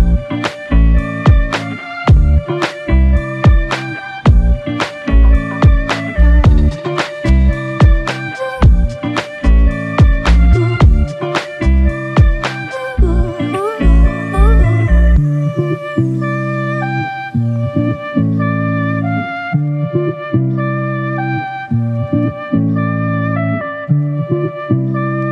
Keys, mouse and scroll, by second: 8.1 alt+click, 9.6 shift+click, 11.4 ctrl+click, 13.9 alt+click, 15.9 ctrl+alt+click, 17.3 alt+shift+click, 18.1 alt+click.